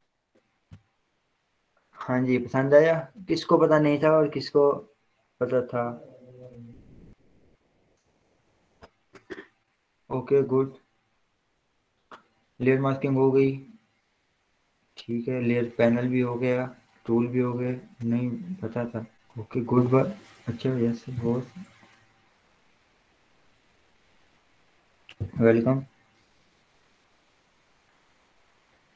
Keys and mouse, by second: 0.1-5.1 drag.